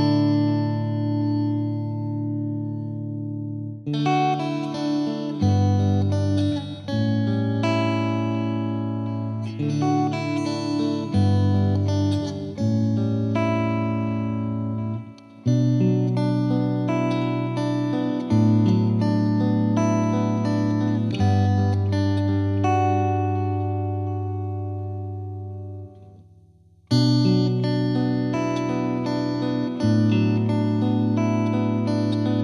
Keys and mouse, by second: 0.5 click, 0.8 click, 1.5 click, 2.3 click, 2.9 click, 3.9 click, 4.8 click, 5.3 Escape, 5.6 F3, 5.9 click, 7.3 click, 8.0 click, 8.8 click, 9.3 click, 9.9 Delete, 12.8 click, 13.5 click, 13.7 click, 14.6 click, 16.0 click, 16.6 click, 17.3 click, 17.4 click, 19.4 click, 19.7 click, 21.1 Escape, 22.1 alt+click, 22.8 alt+click, 22.8 shift+click, 23.1 shift+click, 23.7 click, 24.6 right click, 25.4 click, 26.1 click, 26.2 click, 26.6 click, 27.0 click, 27.3 click, 28.1 click, 28.8 click, 29.9 right click, 31.2 Escape, 32.2 alt+click.